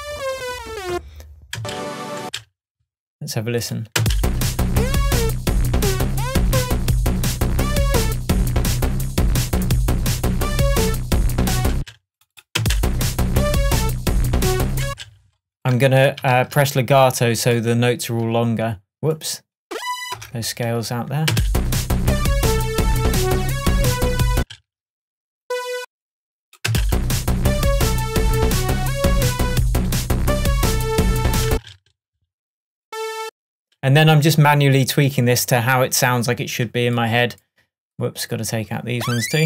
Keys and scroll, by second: 1.6 space, 4.0 space, 11.8 space, 14.9 space, 16.4 super+a, 20.2 BackSpace, 21.4 space, 24.4 space, 26.7 space, 31.5 space.